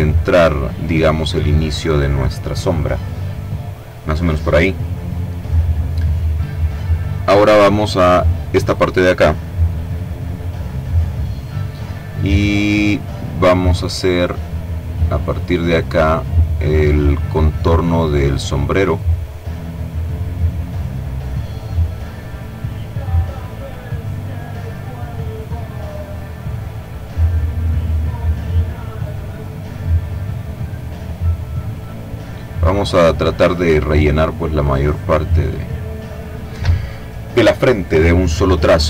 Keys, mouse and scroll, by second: 8.0 click, 14.7 click, 15.4 click, 16.1-17.7 drag, 18.3 click, 19.7 click, 21.3 click, 22.1 click, 23.5 click, 24.3 click, 25.3 click, 26.1-27.1 drag, 27.1 click, 27.8-28.9 drag, 30.2 click, 31.2 click, 31.9 click, 32.6 click, 33.2 click, 34.0 click, 35.2 click, 38.7 click.